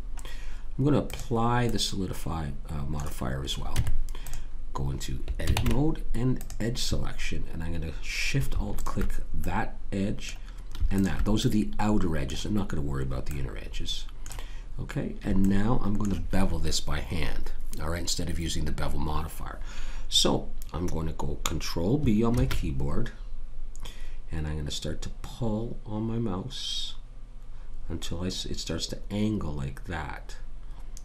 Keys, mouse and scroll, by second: 1.0 click, 3.7 Tab, 5.5 ctrl+Tab, 8.8 click, 9.4 right click, 10.6 middle click, 10.9 click, 13.3 middle click, 22.3 ctrl+b.